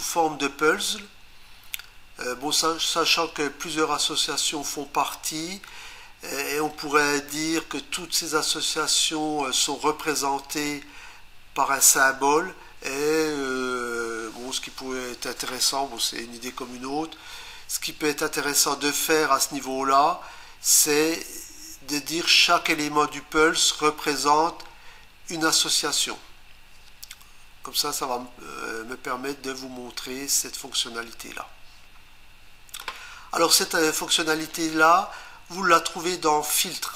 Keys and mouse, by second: 36.6 click.